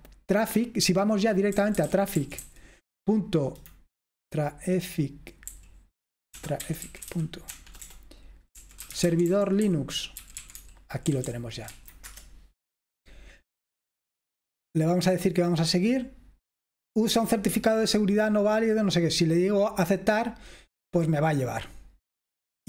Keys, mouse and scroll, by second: 0.0 click, 1.7-3.0 typing, 5.7 typing, 6.9-11.1 typing, 11.2 Down, 11.4 Down, 11.8 Up, 12.2 Return, 14.8 click, 16.0-17.7 scroll down 1, 17.7-18.6 scroll down 1, 18.6 scroll down 1, 18.7 typing, 19.5 click.